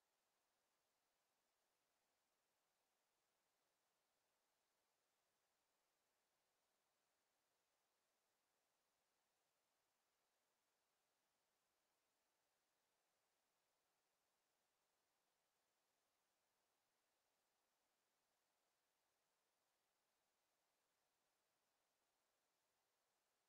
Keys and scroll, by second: 5.3 Delete.